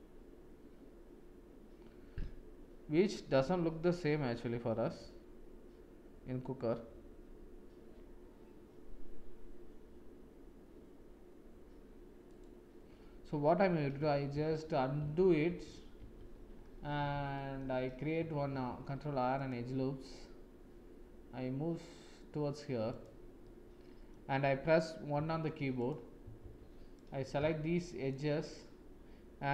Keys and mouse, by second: 14.4 ctrl+z, 17.3 shift+click, 18.4 ctrl+r, 23.4 middle click, 26.4 shift+z, 26.9 click.